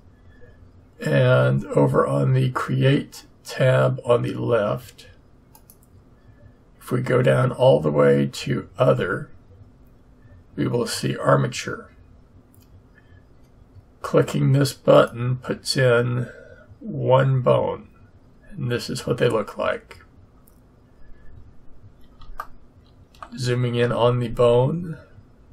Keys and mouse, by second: 5.5-7.4 drag, 14.9-16.6 drag, 22.4-24.4 middle drag, 24.5-25.5 middle drag.